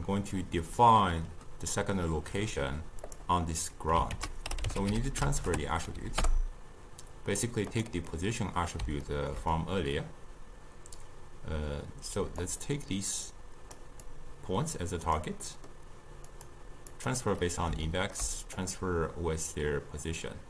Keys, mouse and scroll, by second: 4.2 ctrl+a, 8.2-12.5 middle drag, 12.5-15.5 drag, 15.5-16.4 middle drag, 16.4-17.5 drag, 17.5-18.6 middle drag, 18.6-20.4 drag.